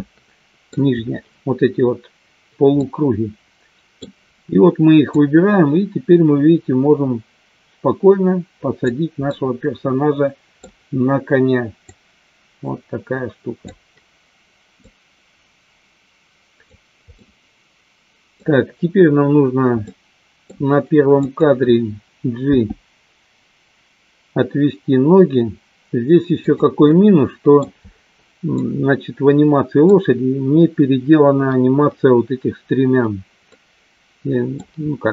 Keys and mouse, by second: 2.9-4.0 middle drag, 5.1-9.1 drag, 9.2-10.6 middle drag, 11.8-14.1 drag, 14.7-17.0 drag, 17.3-18.4 middle drag, 19.9 middle click, 21.1-22.3 drag, 22.5 g, 26.9 middle click, 28.6-29.9 middle drag, 33.5 middle click.